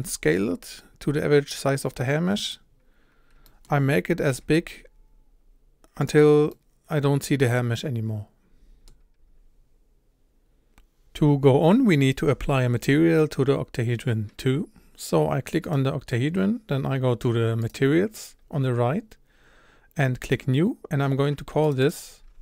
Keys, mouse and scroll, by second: 2.7-3.4 scroll up 4, 3.4 shift+middle drag, 3.7-4.3 scroll up 3, 4.4 s, 6.6-10.4 middle drag, 10.4-15.7 scroll up 1, 15.7 click, 20.3-22.4 drag.